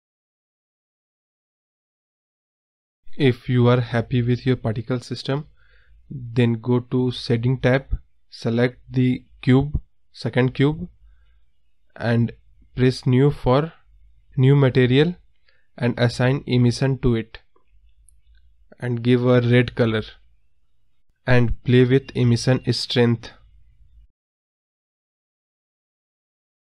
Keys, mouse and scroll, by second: 1.4 scroll up 1, 1.5 scroll down 1, 1.8 middle click, 2.1 scroll down 1, 3.0 scroll up 2, 4.5 click, 5.2 scroll down 1, 5.5 scroll up 1, 9.2 click, 10.3-13.0 drag, 13.6 x, 17.8-21.9 drag, 22.6 scroll up 1, 22.7-23.3 scroll down 7, 22.8 middle drag, 23.3 middle click, 24.2 click, 24.9 KP_0, 25.2 scroll up 2, 25.6-26.0 scroll down 1, 26.0-26.7 scroll up 2.